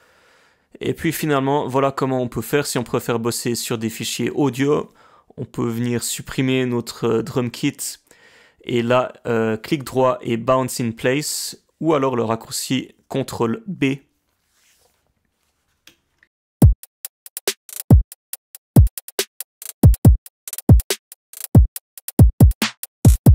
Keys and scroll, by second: 6.4 BackSpace, 10.7 ctrl+b, 11.4-12.6 typing, 14.9 Return, 14.9-16.1 typing, 16.1 Return.